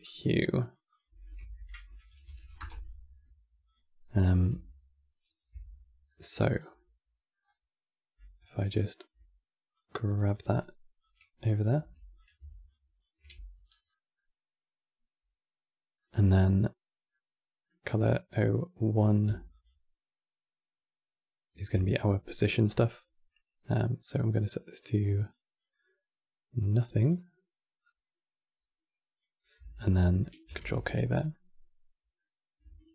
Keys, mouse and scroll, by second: 1.1 F2, 3.3 click, 3.8-4.1 scroll down 2, 5.8 middle click, 6.3 scroll down 4, 6.4 middle click, 7.2-7.5 scroll up 9, 8.4 shift+right click, 9.4 click, 10.7 click, 11.1 click, 11.5 g, 12.4 alt+click, 13.0 x, 13.4 scroll down 4, 13.6-16.0 middle drag, 16.0 scroll up 7, 16.8-19.3 middle drag, 19.3 ctrl+shift+click, 23.7 click, 26.7 click, 30.2 ctrl+h, 31.0-32.9 middle drag.